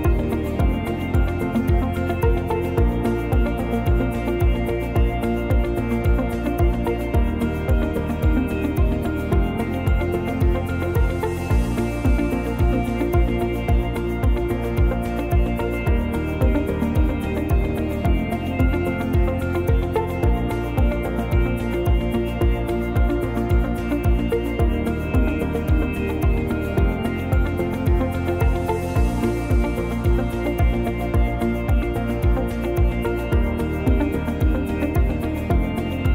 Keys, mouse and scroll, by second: 0.4 s, 1.5 middle click, 2.0 scroll up 2, 3.9 click, 5.4 click, 5.8-6.4 scroll up 2, 6.4 click, 7.3 click, 8.1 click, 8.8 click, 9.4 click, 11.2 s, 12.4 click, 15.3 Tab, 15.8 click, 18.0 click, 18.4 click, 19.7 click, 20.8 ctrl+z, 22.0 alt+z, 22.2 click, 23.4 click, 27.2 Tab, 27.6 click, 28.0 click, 28.7 click, 29.5 click, 30.0 right click, 31.4-31.7 scroll up 2, 31.7 s, 33.7 click, 34.3 middle click, 35.2-35.7 scroll down 1.